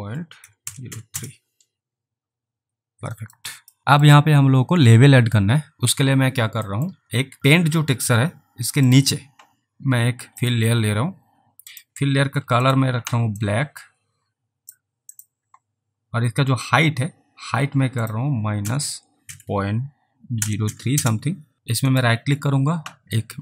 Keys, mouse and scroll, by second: 0.2-1.4 typing, 3.3 alt+right click, 3.5 alt+click, 3.8 alt+`, 3.9 alt+middle click, 6.8 alt+middle click, 8.9 click, 13.5 click, 15.2 click, 18.0 click, 18.6-21.2 typing, 21.5 ctrl+z, 21.9 right click.